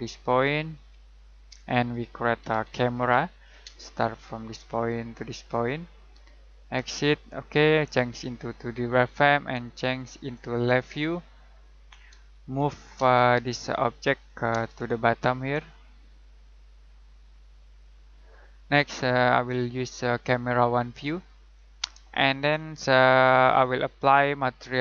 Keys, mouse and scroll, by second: 2.1-3.6 typing, 4.5 click, 12.5 m, 12.9 space, 13.5 click, 14.5 space, 14.7-15.5 scroll up 1, 15.5 click, 18.1-19.3 scroll down 1, 19.3 click, 22.0 middle click.